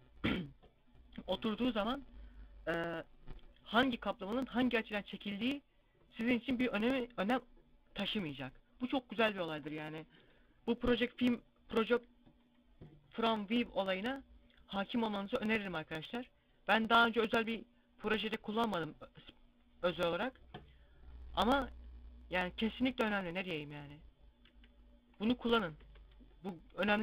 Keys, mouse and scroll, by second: 22.8 right click, 24.4 g, 25.2 right click, 25.7 Tab, 25.9 scroll down 2, 26.3 middle click.